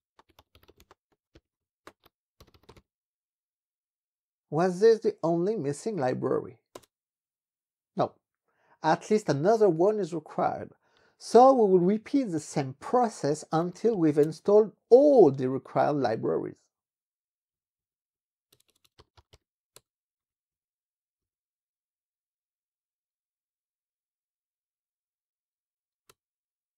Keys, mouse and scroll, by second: 0.0-3.3 typing, 6.8 Return, 11.0 ctrl+b, 11.2 Up, 11.6 Up, 12.4-14.5 typing, 17.6 Up, 18.1 Left, 18.6-19.9 typing, 20.2 ctrl+b, 20.6 Down, 21.2 Up, 26.1 Return.